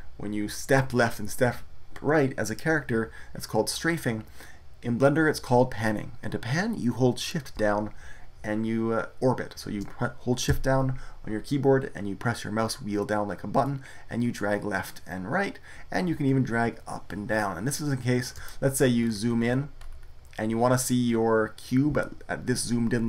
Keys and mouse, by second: 11.2-14.0 middle drag, 15.1 middle click, 15.7 middle click, 18.8-21.9 middle drag.